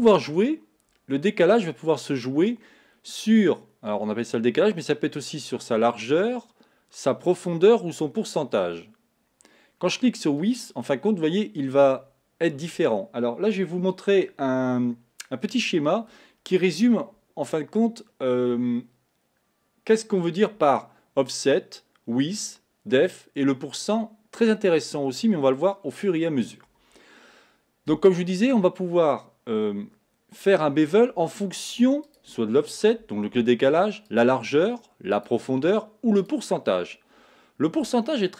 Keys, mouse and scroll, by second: 10.4 click, 32.1 click, 34.1 click, 35.2 click, 36.2 click.